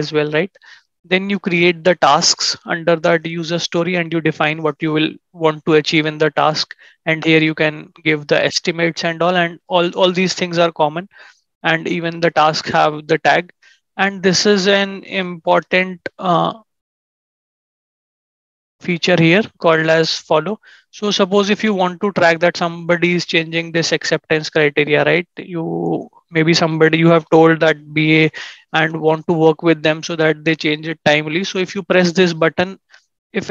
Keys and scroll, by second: 15.5 ctrl+shift+#, 18.3 ctrl+z, 28.6 ctrl+shift+&.